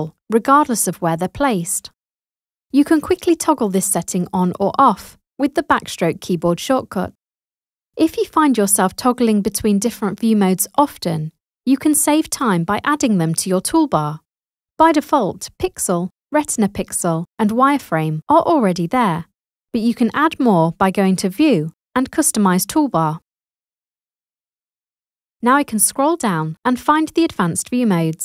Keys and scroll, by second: 5.7 \.